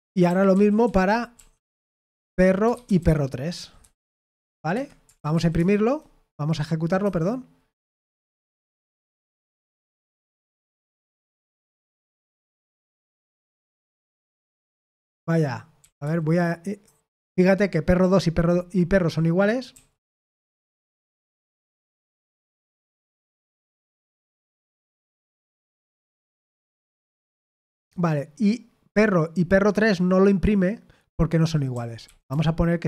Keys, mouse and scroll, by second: 0.0-1.3 typing, 2.4-5.8 typing, 4.7 Escape, 7.0 F5, 11.2 Escape, 11.7-12.6 typing, 13.6 F5, 14.8 Escape, 15.7 typing, 19.7 d, 21.1 shift+;, 21.8 Escape, 22.4 F5, 23.6 Escape, 31.7-32.8 typing.